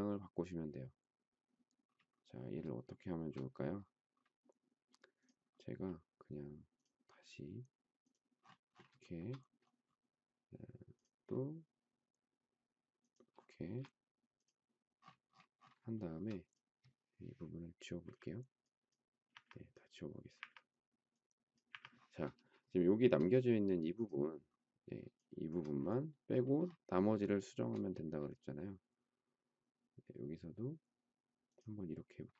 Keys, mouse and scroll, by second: 2.8 shift+middle click, 9.0 shift+middle click, 13.6 space, 15.9 shift+middle click, 18.0 Delete, 19.3 Delete, 20.3 Delete, 21.7 Delete, 25.1 shift+click, 27.4 shift+middle click, 27.6 shift+scroll down 1.